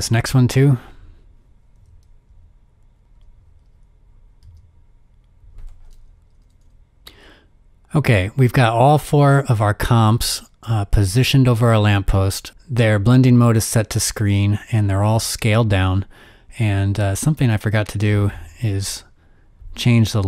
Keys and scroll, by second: 1.6 v, 2.9-6.9 typing.